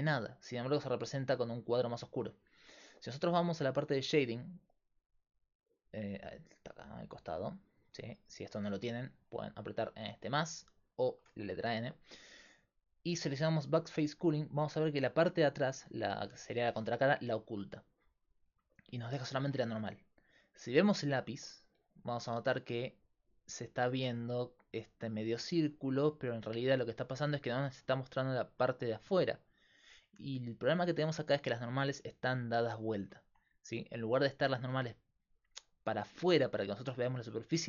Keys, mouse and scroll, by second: 3.9-8.3 middle drag, 8.3 click, 9.3 click, 10.3 click, 10.8 click, 17.4 middle click, 32.9 Tab, 33.8-35.6 drag, 34.6 x.